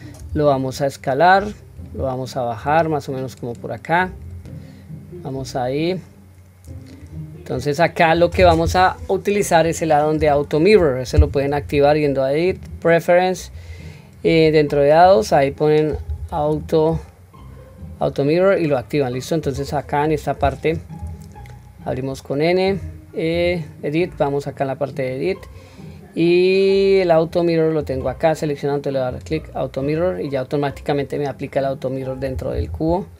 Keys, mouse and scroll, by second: 0.2 s, 2.6-4.2 drag, 6.6-7.0 scroll up 1, 12.5-13.8 drag, 22.7 click, 23.3 click, 27.8 click, 29.1 click, 32.6 Tab.